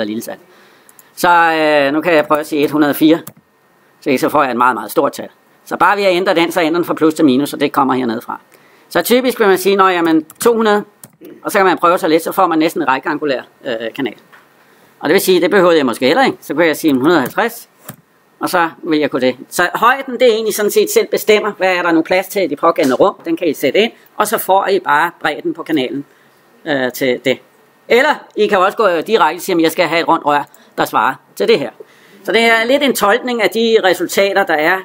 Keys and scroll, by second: 3.1 Return, 10.9 Return, 17.7 Return.